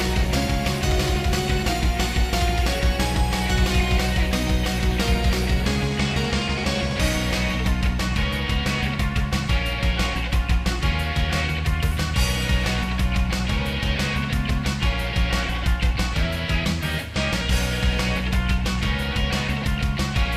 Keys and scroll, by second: 0.0 ctrl+z, 8.7 ctrl+z, 14.3 ctrl+s, 18.0 ctrl+z, 19.8 ctrl+z.